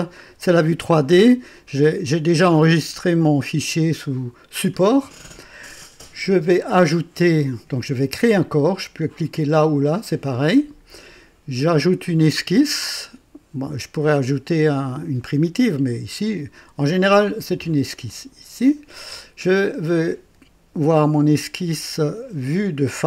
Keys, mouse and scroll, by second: 9.9 click, 18.0 click.